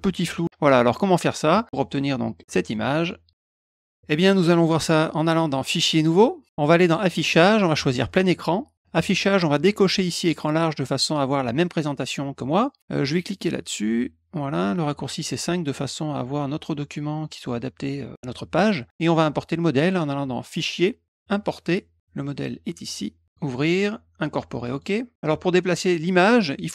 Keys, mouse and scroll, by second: 2.3 click, 2.6 click, 3.0 click, 3.3 click, 3.5 click, 5.6 click, 6.1 click, 6.8 click, 8.0 click, 8.8 click, 10.4 click, 15.2 click, 20.5 click, 23.3 click, 24.6 click.